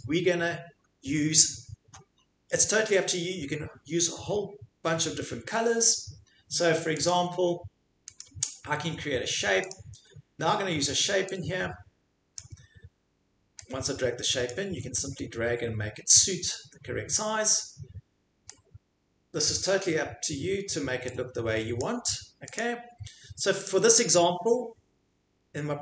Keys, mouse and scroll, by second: 7.1 click, 8.2 click, 9.7 click, 12.4 click, 14.5 click, 17.2 click, 19.4 click, 21.8 click, 22.5 click, 23.6 click.